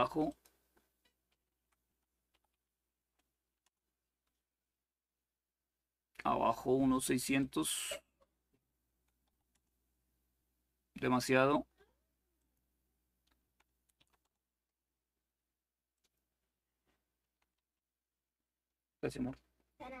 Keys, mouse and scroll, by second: 0.0 click, 1.3 Delete, 1.5 Delete, 2.1 typing, 3.4 Return, 3.4 typing, 7.1 click, 8.6 Delete, 9.0 0, 9.3 Return, 12.2-13.2 drag, 13.2 Delete, 13.7 2, 14.0 Return, 15.7-16.9 drag, 17.0 Delete, 17.3 3.